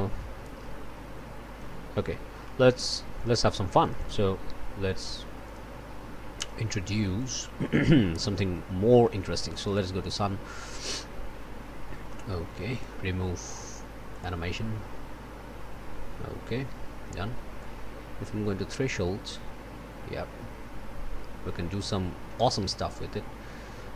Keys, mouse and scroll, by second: 2.4 click, 3.8 click, 6.3 click, 7.2 click, 7.6 click, 8.1-8.7 scroll up 1, 8.9-9.9 scroll up 1, 12.7-13.0 scroll up 1, 20.5-22.6 drag.